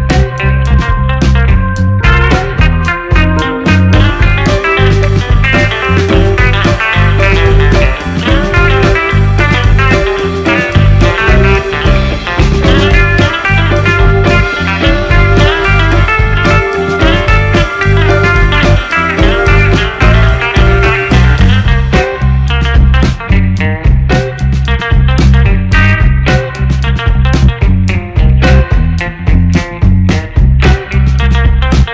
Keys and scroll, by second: 3.2 1, 3.4 Return, 5.8 1, 6.1 6, 6.3 Return, 29.1 2, 29.3 Return, 31.5 space.